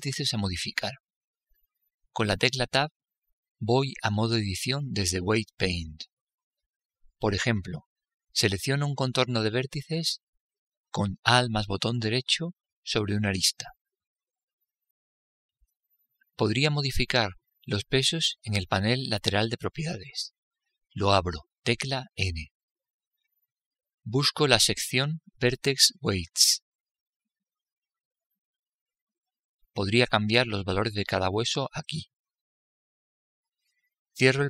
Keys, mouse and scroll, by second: 3.1 Tab, 12.0-13.8 right drag, 21.8 n, 31.8-34.4 drag.